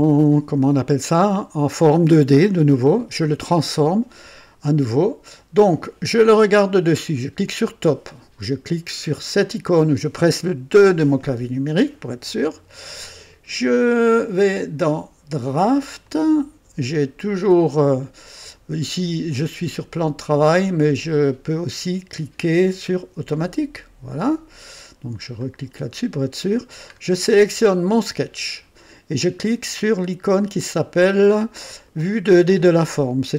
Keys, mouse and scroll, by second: 7.4 click, 9.4 click, 10.7 KP_2, 14.0 click, 16.0 click, 20.3 click, 20.9 click, 23.3 click, 24.2 click, 25.4 click, 26.9-27.3 scroll down 1, 27.9 click.